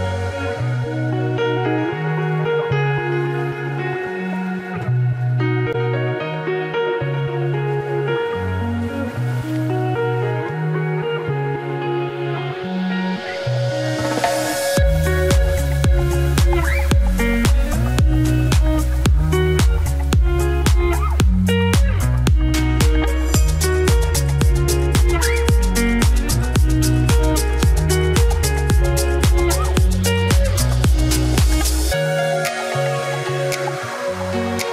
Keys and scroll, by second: 28.5 Delete, 32.1 Delete.